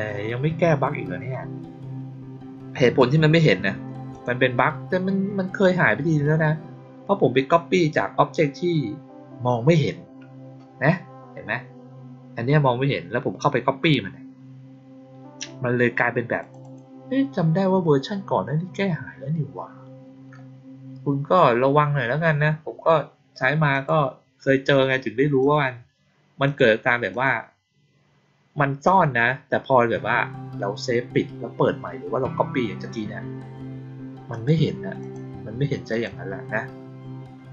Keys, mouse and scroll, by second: 4.0 click, 16.3 click, 16.5 click, 23.6 click, 25.3 click, 26.3 click, 27.0 click, 34.2 click, 34.9 click, 35.8 click.